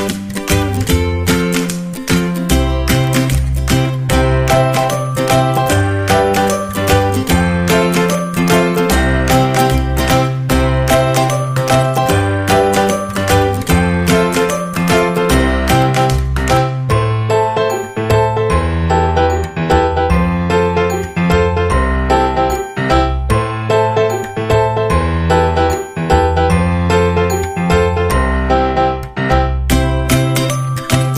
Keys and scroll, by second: 19.1 Return.